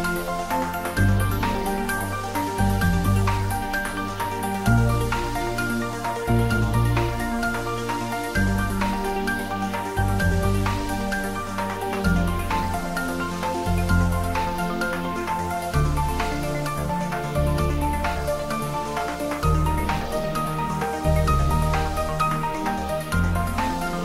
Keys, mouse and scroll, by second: 0.1 ctrl+middle click, 0.5 middle click, 1.5 middle click, 2.5 ctrl+s, 2.7 middle click, 3.5 click, 3.9 shift+middle click, 4.7 shift+a, 5.5 shift+click, 5.8 ctrl+shift+middle click, 6.2 s, 7.2 click, 7.4 ctrl+middle click, 8.4 ctrl+middle click, 8.7-14.3 typing, 9.5 click, 10.4 click, 11.7 click, 12.3 click, 13.2 click, 14.1 click, 15.3 click, 15.5-17.2 shift+middle drag, 17.2 click, 17.7 ctrl+middle click, 18.3 ctrl+shift+middle click, 18.6 ctrl+middle click, 19.0-21.2 shift+middle drag, 20.9-22.6 typing, 21.7 click, 22.8 click, 23.9 middle click.